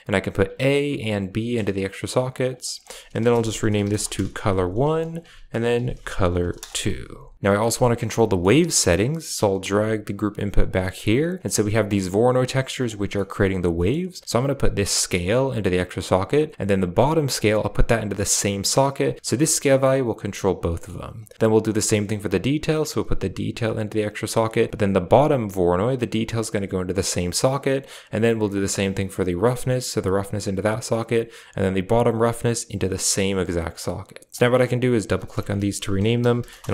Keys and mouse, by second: 0.9-1.5 drag, 1.6 click, 2.5-4.0 drag, 4.9 click, 5.0 ctrl+click, 5.5 ctrl+click, 7.5 middle click, 8.0 middle click, 9.5 g, 10.7 middle click, 10.9 g, 11.8 click, 12.2 click, 12.8 drag, 13.0 middle click, 13.7 middle drag, 14.8-15.6 drag, 17.2-18.9 drag, 19.1 drag, 20.6 middle click, 22.5-23.9 drag, 25.8-27.0 drag, 27.1 click, 28.4-29.7 drag, 29.9 click, 32.0-33.4 drag, 34.3 click, 34.3-36.7 drag.